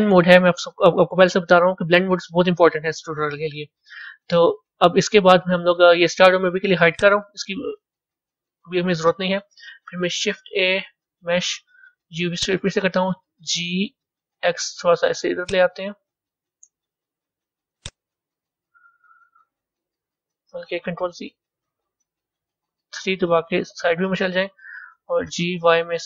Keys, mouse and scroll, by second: 3.5-3.8 scroll up 2, 4.2-6.8 middle drag, 6.8 click, 8.1 KP_1, 9.0-10.2 scroll up 2, 10.2 shift+a, 13.4 g, 16.0-16.9 middle drag, 16.9 z, 18.1 KP_1, 21.4 ctrl+z, 22.7 KP_3, 25.2 g.